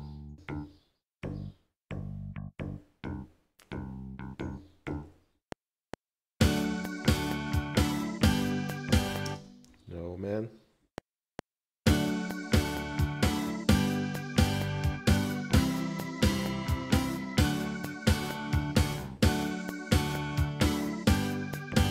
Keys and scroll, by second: 5.4 F7, 9.3 space, 9.7 z, 10.8 F7.